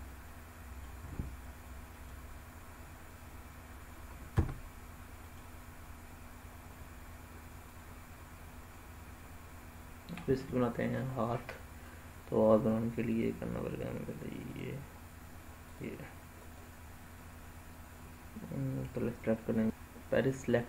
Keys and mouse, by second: 0.2 middle click, 1.9-2.8 right drag, 4.2 Tab, 5.2-7.8 right drag, 9.8 ctrl+z, 12.9 click, 14.3 click, 16.4 click.